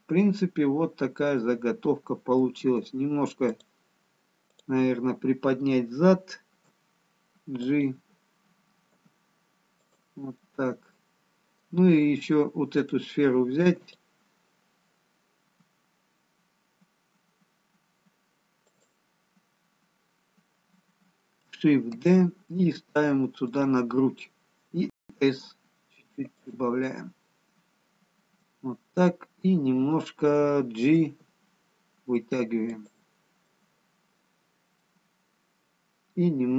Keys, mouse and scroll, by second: 3.0-7.2 scroll up 1, 7.2 click, 7.2 g, 10.3 g, 10.4 middle click, 12.7 middle click, 14.4 click, 16.0 g, 22.2 shift+d, 28.3 middle click, 30.9 g, 33.8 middle click.